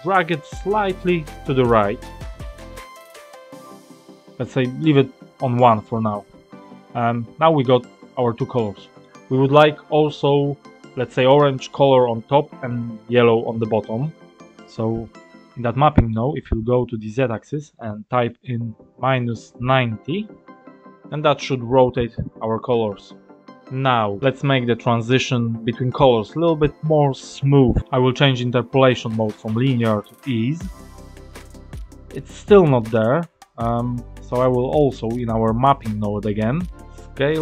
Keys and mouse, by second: 8.6 click, 15.1 click, 17.1-20.8 drag, 22.5 click, 29.8-30.7 drag, 33.5 click, 34.8-37.0 drag.